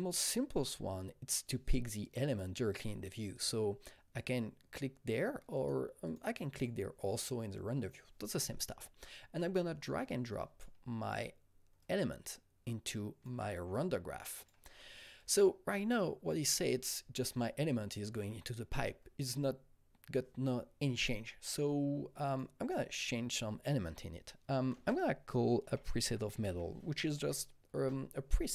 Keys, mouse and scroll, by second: 2.7 click, 3.3 click, 4.2 click, 5.5 click, 6.0 click, 6.5 click, 9.4-11.8 drag, 11.8-21.8 shift+drag, 22.2-24.7 drag, 24.7 ctrl+space, 25.4-27.0 typing, 27.1 Up, 27.8 Return.